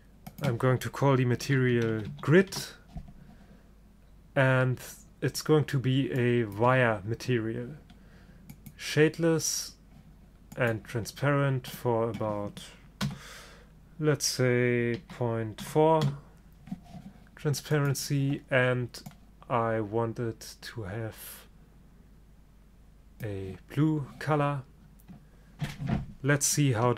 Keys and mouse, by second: 6.3-8.1 drag, 8.0 middle click, 8.7-10.5 drag, 10.7-13.6 drag, 17.8-19.7 drag.